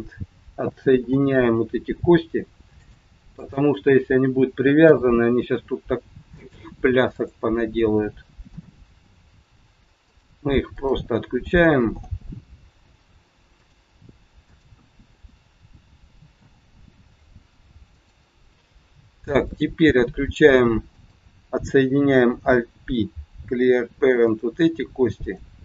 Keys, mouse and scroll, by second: 1.0 alt+p, 3.3 click, 4.9 alt+p, 7.0 click, 8.4 alt+p, 10.6 click, 11.9 alt+p, 14.5 click, 16.4 alt+p, 18.7 scroll down 1, 19.5 middle click, 20.9 click, 22.4 alt+p, 25.1 click.